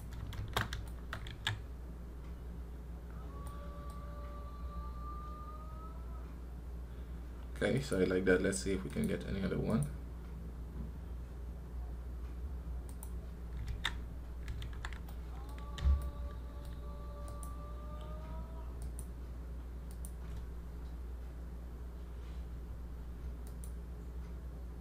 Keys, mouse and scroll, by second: 0.0 scroll down 1, 0.7-2.7 shift+middle drag, 2.9 scroll down 2, 3.3-8.0 middle drag, 8.0-13.4 drag, 18.7-24.0 drag.